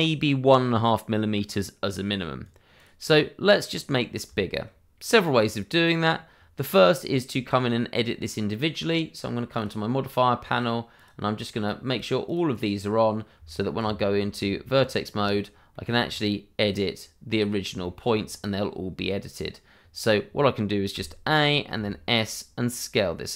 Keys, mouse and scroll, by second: 1.8 right click, 3.1 middle click, 3.8 click, 4.3 shift+middle click, 7.6 middle click, 9.5 click, 12.3 double click, 13.5 shift+middle click, 13.8 Tab, 14.7-15.2 scroll up 1, 15.7 shift+middle click, 16.1-16.5 scroll up 1, 16.7 click, 17.5 scroll down 1, 17.8 shift+middle click, 18.2-18.9 scroll up 1, 20.9 a.